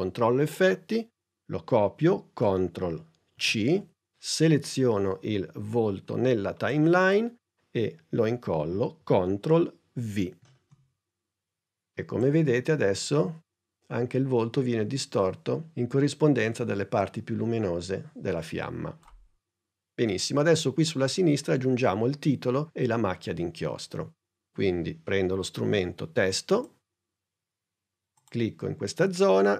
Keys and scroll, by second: 3.4 super+c, 10.5 super+v.